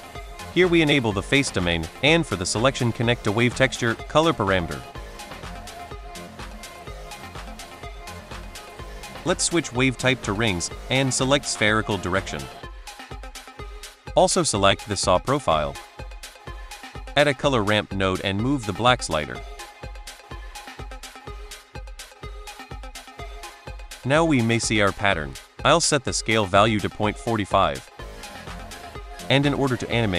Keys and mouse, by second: 0.2-1.4 drag, 1.6 middle click, 2.1 drag, 2.6 middle drag, 3.3 click, 5.7 click, 6.1 middle drag, 7.6 middle drag, 8.1-10.0 drag, 10.8-12.4 drag, 13.2-14.9 drag, 16.6 middle drag, 16.8 shift+a, 18.9 click, 19.2 click, 20.0 middle click, 20.8-23.2 drag, 23.6 middle click, 24.3 middle drag, 24.7-26.5 drag, 28.0 middle click, 29.8 click.